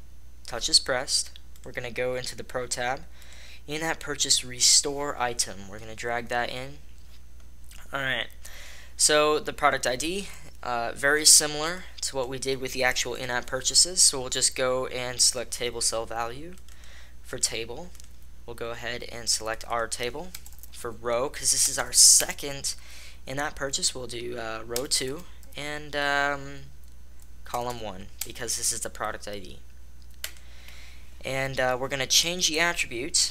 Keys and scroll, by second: 20.7 Right, 20.9 Right, 21.0 Right, 21.1 Right, 21.9 BackSpace, 22.1 BackSpace, 22.5 BackSpace, 25.3 Right, 25.3-28.2 Right, 27.9 BackSpace, 28.0 BackSpace, 28.5 BackSpace.